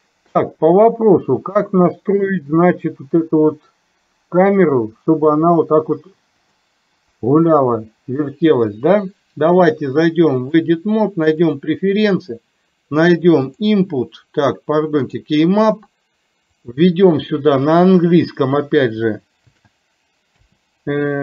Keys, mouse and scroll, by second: 7.3 Down, 10.6-11.9 drag.